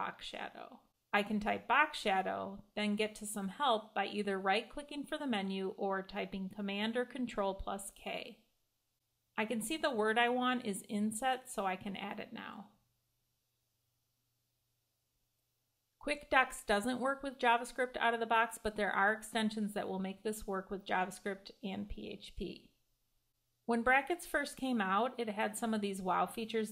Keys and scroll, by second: 6.6 super+k, 12.4 Escape.